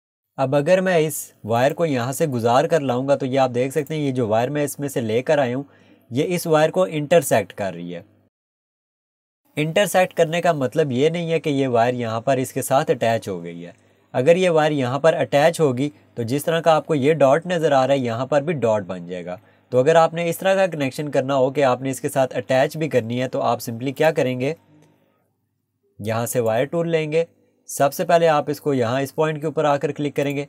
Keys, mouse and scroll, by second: 4.4 Escape, 6.2 scroll up 1, 23.5 Escape, 24.0 click, 24.8 Delete, 26.4 click, 30.2 click.